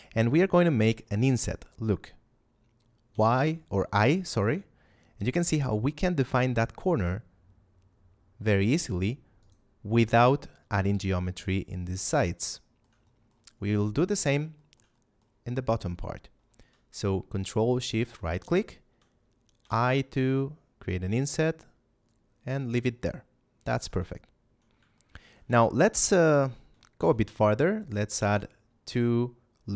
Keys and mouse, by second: 9.3 click, 12.1 shift+middle click, 12.9 middle click, 14.1 right click, 14.5 shift+middle click, 14.9 middle click, 17.6 ctrl+shift+right click, 22.5 click, 22.9 shift+middle click, 24.9 shift+middle click, 25.4 a, 27.0 ctrl+r.